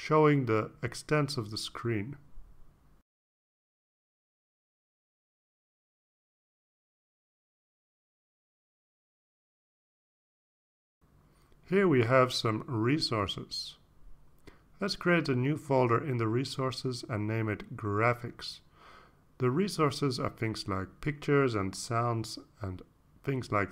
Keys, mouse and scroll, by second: 1.7-2.6 drag, 3.5-4.4 drag, 4.8-5.5 drag, 6.2-6.7 drag, 7.6 click, 15.6 right click, 16.9 click, 17.6 right click, 18.4 click, 19.6-21.8 typing, 22.2 Return.